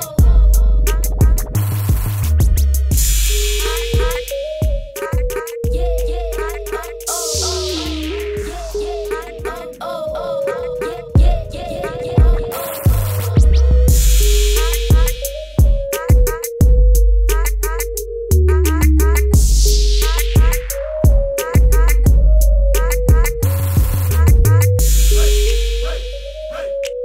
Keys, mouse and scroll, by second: 0.3 space, 0.9 z, 1.7 click, 2.0 space, 2.5 click, 3.1 Up, 3.3 Right, 3.4 click, 3.7 Down, 3.9 click, 4.3 Up, 4.5 click, 4.7 Down, 4.8 click, 5.3 click, 6.9 z, 7.1 click, 10.1 click, 10.7 shift+click, 11.9 shift+click, 12.5 space, 12.7 shift+click, 13.5 space, 13.7 click, 13.9 z, 14.1 click, 15.5 space, 15.6 click, 15.7 space, 16.0 click, 17.6-18.8 typing, 18.5 click, 20.1 z, 20.2 click, 21.5-23.3 typing, 22.6 click, 22.8 click, 23.4 click, 26.6 b.